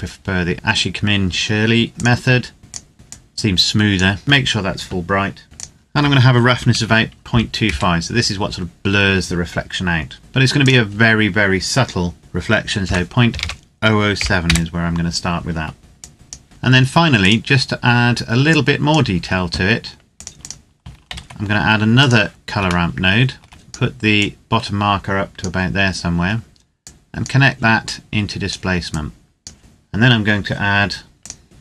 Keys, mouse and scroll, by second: 1.9 click, 5.4 click, 6.3 KP_Decimal, 6.5 KP_2, 7.0 KP_5, 7.4 KP_Enter, 10.4 click, 12.6 KP_Decimal, 13.0 KP_0, 13.9 KP_7, 14.2 KP_Enter, 15.8 click, 16.4-17.0 scroll down 1, 17.0 click, 17.6-18.5 scroll down 1, 18.5 click, 21.1 shift+d, 21.8 click, 22.9 shift+middle click, 23.5 click, 26.2-26.8 scroll down 1, 26.8 click, 29.6-29.9 scroll down 1, 31.1 click.